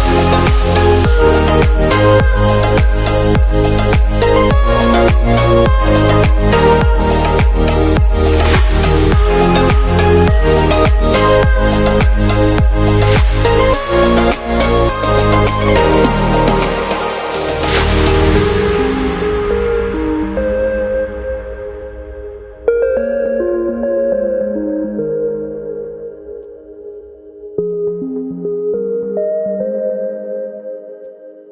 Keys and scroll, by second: 19.4 typing, 21.6 super+z, 22.5 v, 22.9 Return, 23.0 super+t, 23.6 Return, 25.7-26.3 typing.